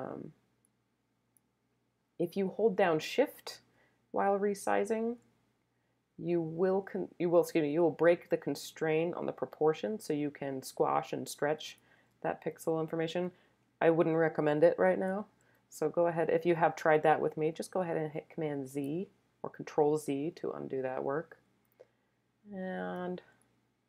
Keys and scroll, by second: 18.7 super+z.